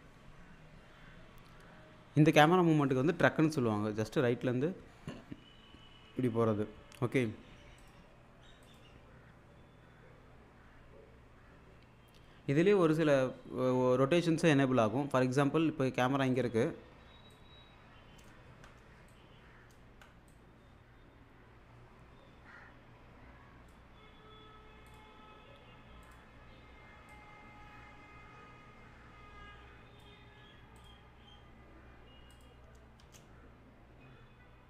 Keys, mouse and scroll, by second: 2.8 click, 7.8 click, 16.3 click, 18.5 ctrl+z, 19.1-20.1 click, 19.9 ctrl+z, 20.3-23.7 drag, 32.3 click, 33.0 space.